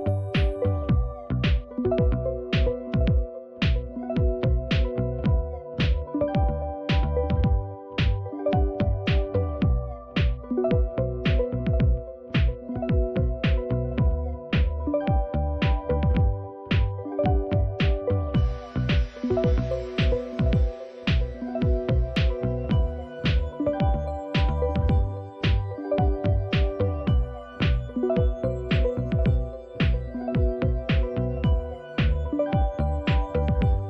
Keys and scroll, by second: 6.4 typing, 7.7-13.3 typing, 17.3 Return.